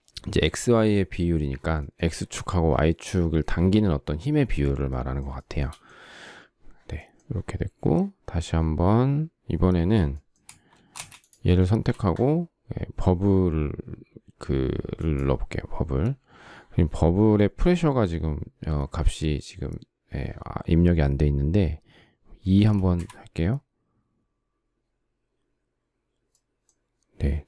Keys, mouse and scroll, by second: 5.0 shift+middle click, 10.6 space, 11.2 shift+middle click, 22.2 2, 22.6 Return.